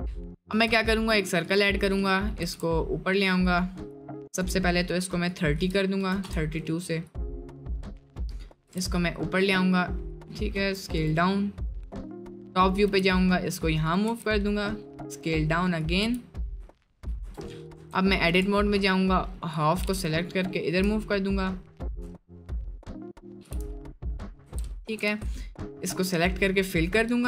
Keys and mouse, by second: 0.5 shift+a, 2.5 g, 4.4 click, 5.3 click, 7.1 click, 8.2 click, 8.7 g, 10.6 s, 12.9 g, 16.0 g, 16.7 shift+middle drag, 17.3 Tab, 17.7 `, 18.3 1, 18.6 click, 19.9 g, 23.4 g, 24.4 Tab, 25.1 a, 25.7 f, 27.1 Tab.